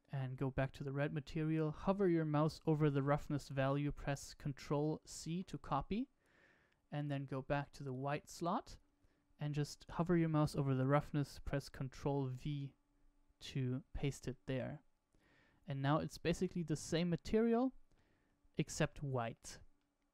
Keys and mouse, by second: 5.0 ctrl+c, 7.1-8.3 drag, 12.3 ctrl+v, 16.7-17.9 middle drag, 18.8-19.3 middle drag, 19.7 shift+middle click.